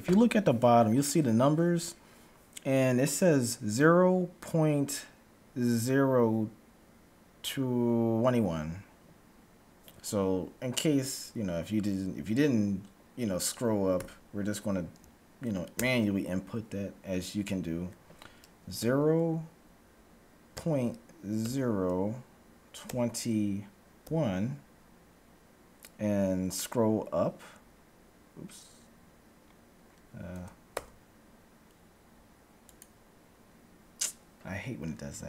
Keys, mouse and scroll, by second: 15.7 ctrl+b.